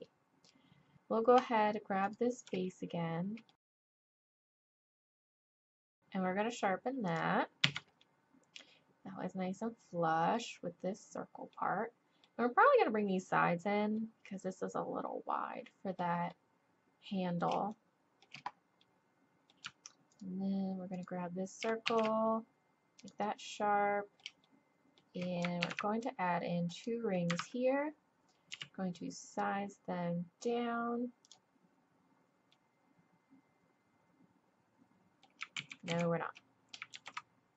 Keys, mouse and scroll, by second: 0.7 click, 0.9 z, 0.9 a, 2.8 middle click, 3.7 ctrl+z, 4.0 click, 4.9 ctrl+z, 4.9 ctrl+z, 5.2-7.1 drag, 5.7 shift+e, 7.6 z, 8.9 middle click, 9.8 middle click, 11.5-14.0 middle drag, 14.0 click, 15.3 click, 16.5 click, 17.1 click, 17.2 middle click, 17.2 click, 17.9 middle click, 19.1-20.1 middle drag, 21.9 shift+e, 24.4 click, 24.6 click, 25.6 ctrl+r, 28.5 s, 32.5-34.6 middle drag, 35.6 ctrl+z, 36.0 ctrl+z, 36.9 ctrl+r.